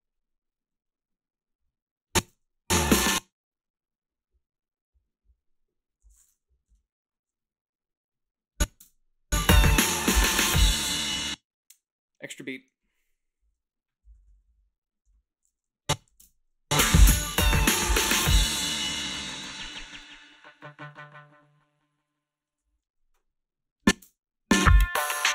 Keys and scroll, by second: 2.2 space, 2.8 space, 8.8 space, 11.0 space, 14.0 ,, 14.1 ,, 14.4 ,, 16.1 a, 16.2 space, 19.5 -, 22.5 space, 22.7 a, 24.0 space.